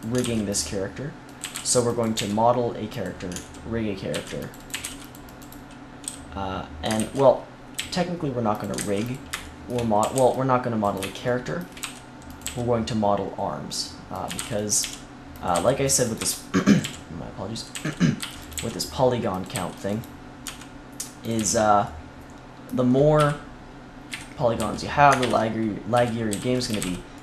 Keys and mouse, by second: 0.1 ctrl+r, 1.3 a, 1.5 c, 2.1 g, 4.0 ctrl+r, 4.6 a, 4.8 c, 6.0 h, 6.9 ctrl+z, 7.7 g, 8.6-10.2 drag, 8.7 ctrl+s, 9.9 a, 10.1 c, 10.9-12.0 drag, 11.7 e, 12.3 click, 12.3 middle click, 12.3 right click, 12.4 g, 14.2-21.3 typing, 21.8 click, 23.1 KP_3, 24.0 KP_1, 24.5 z, 25.1 ctrl+KP_1, 25.9 z, 26.2 c, 26.6 z, 26.7 c.